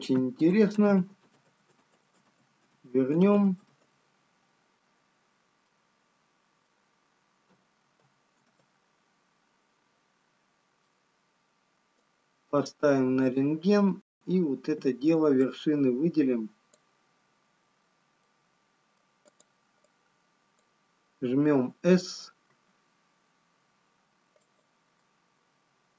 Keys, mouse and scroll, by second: 6.7 middle click, 8.1 ctrl+z, 9.0 ctrl+z, 10.7 scroll down 1, 12.5 middle click, 14.7 click, 16.0 click, 18.9 middle click, 20.8 click.